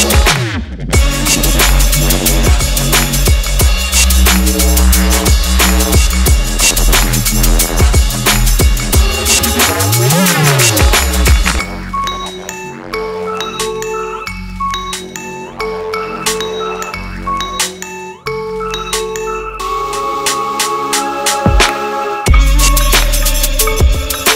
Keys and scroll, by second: 5.9 Delete, 14.7 Delete, 18.3 Delete, 23.5 Delete.